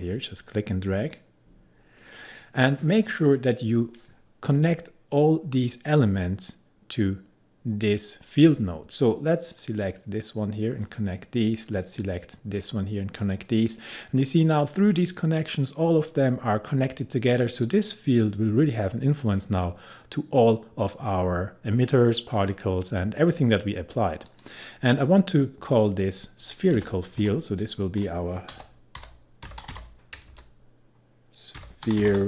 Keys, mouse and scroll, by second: 9.6-17.6 drag, 24.3 click, 26.7 Return, 27.1 Left, 28.3-30.2 typing, 31.3-32.2 typing.